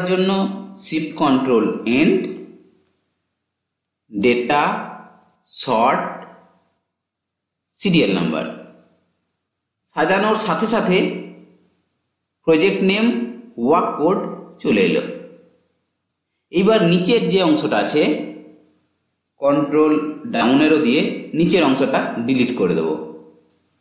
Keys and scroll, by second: 1.1 ctrl+shift+End, 19.3 ctrl+Down.